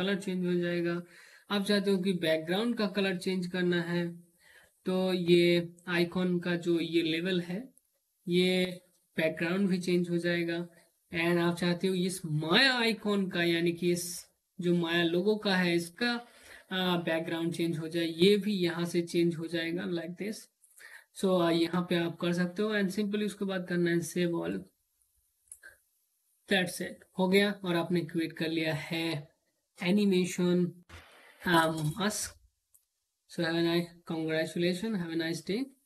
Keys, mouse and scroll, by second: 18.2 click, 24.0 click.